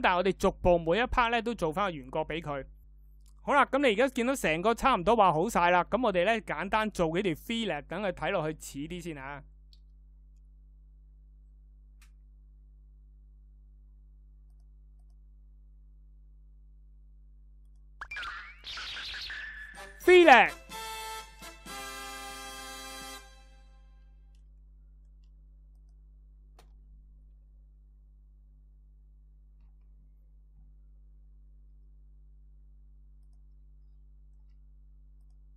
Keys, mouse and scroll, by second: 17.9 f.